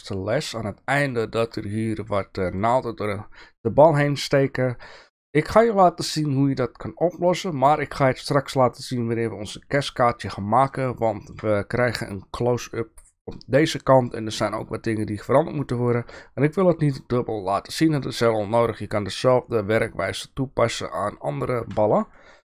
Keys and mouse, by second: 1.2-1.6 shift+middle drag, 2.2-2.6 shift+middle drag, 4.0-4.4 shift+middle drag, 10.8 shift+middle click, 15.6 shift+middle click.